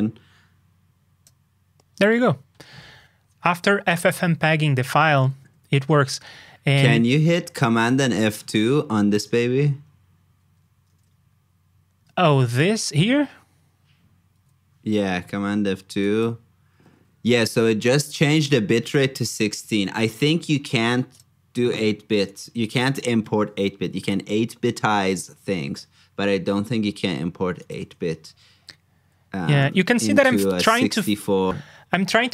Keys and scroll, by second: 10.8 super+Tab, 14.3 super+F2, 30.2 super+Tab.